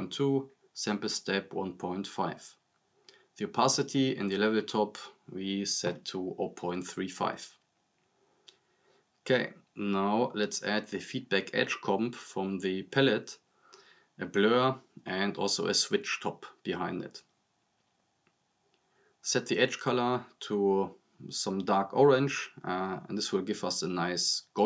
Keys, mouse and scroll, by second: 7.3-7.7 drag, 10.1 click, 13.7 right click, 15.0 click, 17.2 right click, 17.5 click, 17.7-18.6 typing, 18.9 click, 19.9-20.9 drag, 24.5 drag.